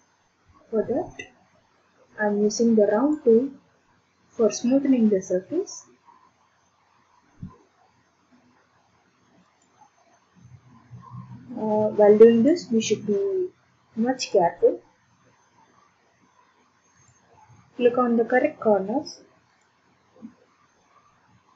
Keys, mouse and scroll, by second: 3.1 click, 8.9 click, 9.7 ctrl+click, 10.6 ctrl+click, 12.6 click, 13.5 ctrl+click, 14.4 ctrl+click, 17.2 ctrl+click, 18.1 ctrl+click, 19.7 ctrl+click.